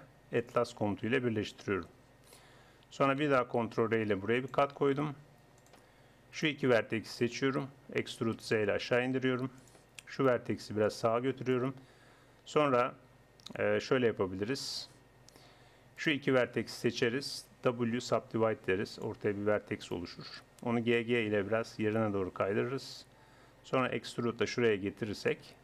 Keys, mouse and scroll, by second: 3.6 ctrl+r, 6.3-9.0 drag, 8.0 e, 10.2-12.6 drag, 10.8-12.0 right drag, 16.0-17.7 drag, 17.7 w, 21.0 click, 21.1 g, 23.9 e.